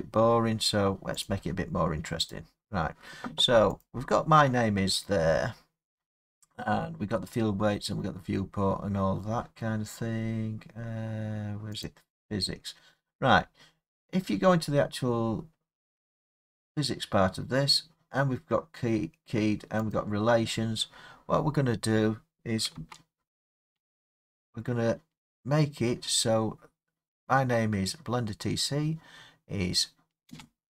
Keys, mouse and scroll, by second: 1.3 click, 2.3 click, 4.9-6.0 scroll, 7.7-9.0 scroll, 11.9 click, 12.4-13.9 scroll, 15.6-16.1 scroll, 16.1 scroll, 20.0 middle click, 20.0 click, 20.5 middle click, 20.6 middle click, 22.8 space, 30.3 space.